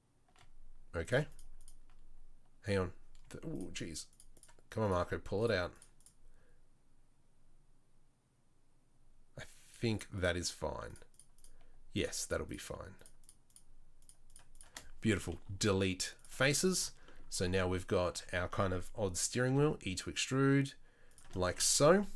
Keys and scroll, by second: 15.5 Delete, 18.1 a, 19.5 e, 21.9 2.